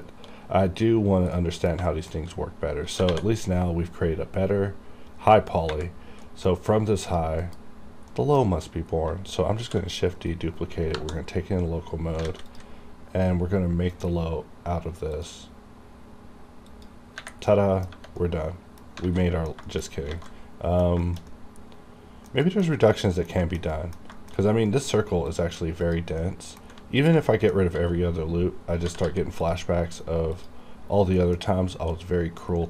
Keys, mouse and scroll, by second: 0.8-1.4 scroll up 1, 1.4 middle click, 1.9 shift+middle click, 3.0 typing, 6.3 middle click, 6.3 middle click, 6.6-7.1 scroll up 1, 7.1 click, 7.5 KP_Decimal, 8.0 scroll down 1, 8.1 middle click, 8.9 scroll up 1, 9.6 shift+d, 10.2 right click, 10.9 KP_Divide, 12.3 alt+a, 12.5 click, 17.6 middle click, 18.2 middle click, 19.1 alt+a, 19.3 middle click, 19.7 shift+middle click, 19.9 scroll up 1, 20.2 alt+a, 20.3 alt+middle click, 21.3 middle click, 22.5 shift+middle click, 22.7 shift+scroll down 3, 23.0 middle click, 23.5 shift+middle click, 23.8 middle click, 24.2 shift+middle click, 24.4-24.7 shift+scroll up 3, 24.7 middle click, 25.3 click, 25.4 click, 26.3 middle click, 27.0 ctrl+click, 28.8 g, 29.1 g, 29.5 click, 31.2 middle click, 32.1 scroll down 1.